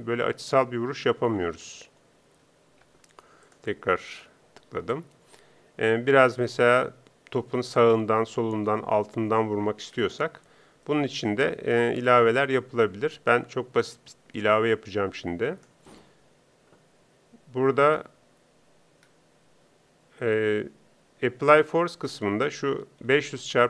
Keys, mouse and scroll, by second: 5.6 p, 12.1 ctrl+Up.